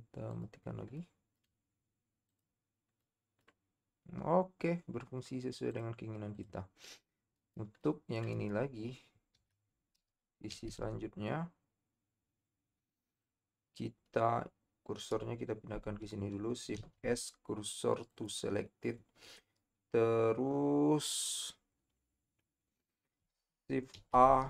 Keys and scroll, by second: 9.6 KP_7, 10.5 z, 16.8 shift+s, 23.9 shift+a.